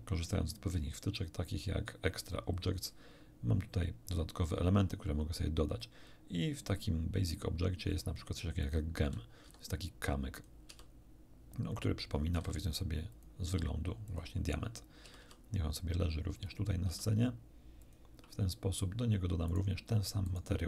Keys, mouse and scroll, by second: 8.6 click, 9.5 g, 10.3 click, 10.7 r, 11.7 click, 12.3 s, 13.1 click, 13.5 g, 14.1 click, 15.0 r, 15.2 r, 16.3 click, 16.9 r, 17.8 click, 19.5 right click, 20.3 right click.